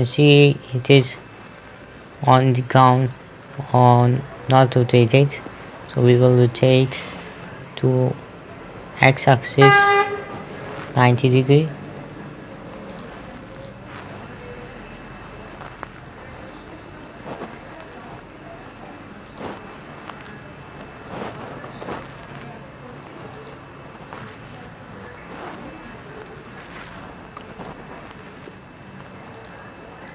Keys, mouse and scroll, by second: 1.3 p, 2.3 Escape, 3.3 right click, 4.5-6.4 middle drag, 7.0 r, 7.9 x, 11.5 KP_9, 11.7 KP_0, 12.6 Return, 13.4 right click, 15.3 r, 15.8 x, 17.5 KP_9, 17.9 KP_0, 18.6 Return, 19.8 right click, 20.7-22.4 typing, 22.8 Return, 23.8 right click, 25.4 r, 26.8-28.2 typing, 28.8 Return, 29.9 right click.